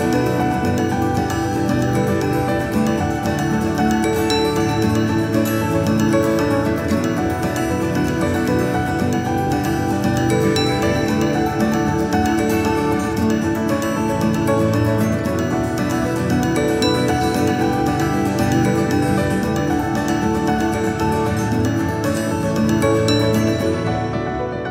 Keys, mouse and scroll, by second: 1.5-1.8 scroll down 1, 1.8-2.2 scroll up 8, 2.2-2.9 scroll down 19, 3.1-3.7 scroll up 16, 3.9-5.6 scroll down 1, 6.8 alt+h, 7.2-8.0 scroll down 3, 8.0 KP_2, 8.1 KP_2, 8.3 KP_2, 9.1 KP_8, 10.7 KP_1, 12.1 g, 19.4-20.1 scroll up 1, 20.1 KP_8, 20.5 click, 21.3 click.